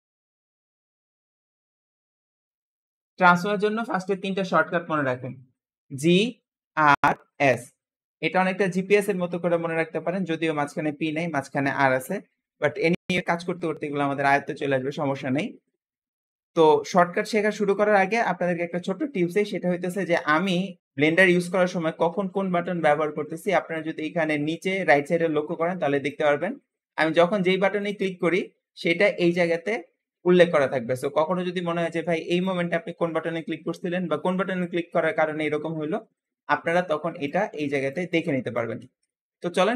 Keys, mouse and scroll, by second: 19.4-26.3 middle drag, 26.7-27.7 middle drag, 27.7 click, 28.2-31.6 right drag, 31.6-32.2 middle drag, 32.2 click, 33.3-34.9 scroll up 3, 34.9-35.3 scroll down 1, 35.3-35.8 scroll up 1, 39.1-39.4 scroll down 2.